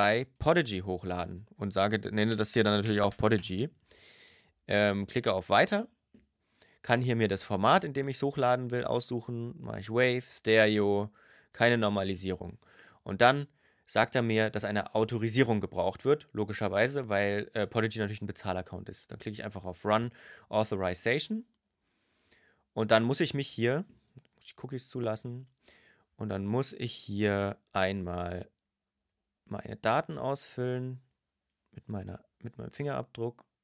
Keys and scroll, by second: 1.7-2.6 typing, 27.0 BackSpace.